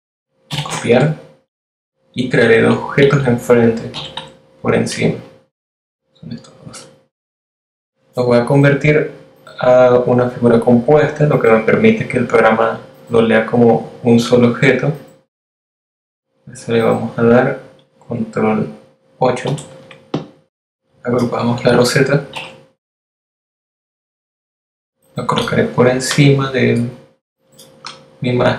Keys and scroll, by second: 2.9 super+f, 18.5 super+8, 21.3 super+g.